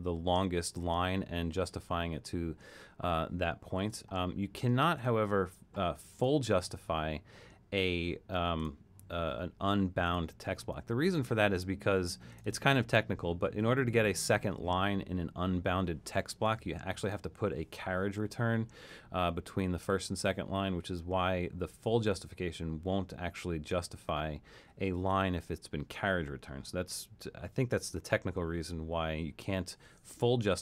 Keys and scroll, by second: 3.7 super+z.